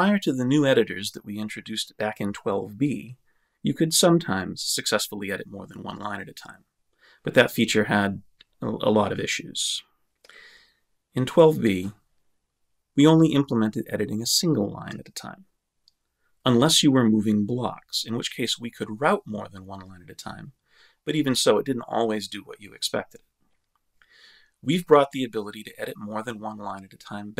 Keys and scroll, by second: 0.0 Left, 5.9 Right.